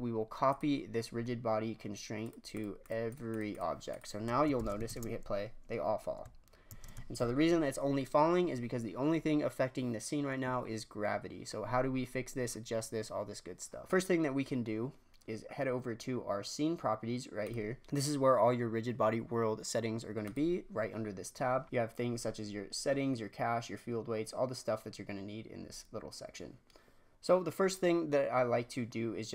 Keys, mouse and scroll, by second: 0.4 click, 2.2 click, 2.5 click, 2.8 click, 3.0 click, 3.3 click, 3.5 click, 4.5 shift+Left, 4.8 shift+space, 6.7 shift+space, 7.1 shift+Left, 17.4 click, 20.2-21.3 drag, 21.3-22.6 scroll down 2, 22.6-25.3 scroll down 2, 25.6-27.1 scroll down 3.